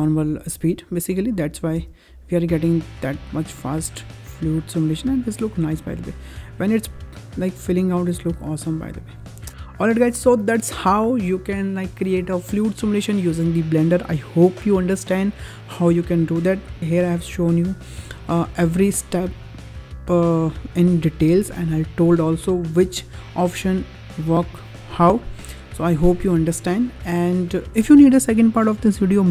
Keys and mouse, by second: 1.1 click, 1.7 space, 9.5 space.